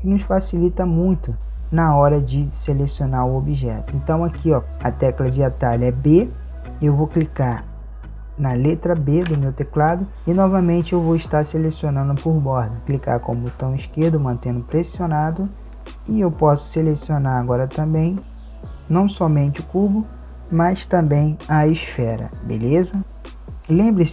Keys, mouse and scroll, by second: 9.3 b, 15.6 a, 15.6 b.